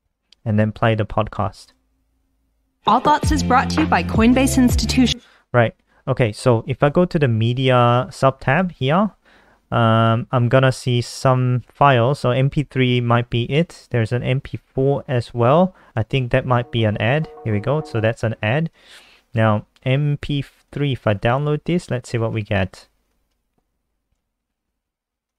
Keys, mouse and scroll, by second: 0.2-0.9 scroll down 5, 1.5 click, 16.0 click, 17.9 click, 21.3 click, 23.3 super+w, 24.2 shift+super+Right, 24.7 End, 25.0 Up, 25.2 Return.